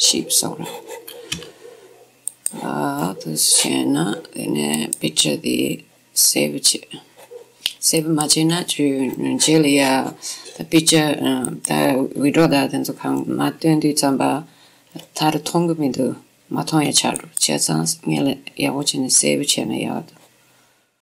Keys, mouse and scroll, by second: 0.0-0.7 scroll down 1, 0.7 scroll down 1, 0.8-1.8 middle drag, 1.6 scroll down 1, 1.6 s, 2.7-4.5 drag, 5.0-6.8 drag, 11.7-13.7 drag, 17.4-19.1 drag.